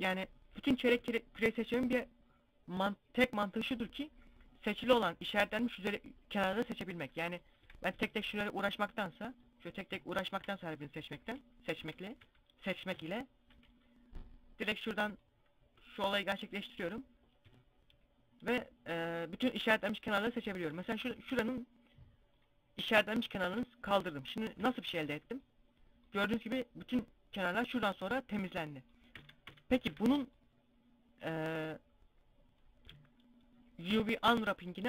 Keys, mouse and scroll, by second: 1.0 KP_1, 2.3 scroll up 1, 6.3 middle click, 6.9 z, 7.4 alt+shift+right click, 8.1 right click, 10.5 KP_1, 10.7 KP_5, 11.2 KP_5, 11.6 z, 15.1 b, 15.8 right click, 20.1 ctrl+e, 22.7 z, 22.8 scroll down 2, 23.2 Tab, 23.4 middle click, 23.8 Tab, 24.1 scroll up 1, 24.3 a, 24.6 middle click, 27.8 middle click, 28.4 a, 28.7 a, 29.2 a, 29.7 middle click, 33.3 u.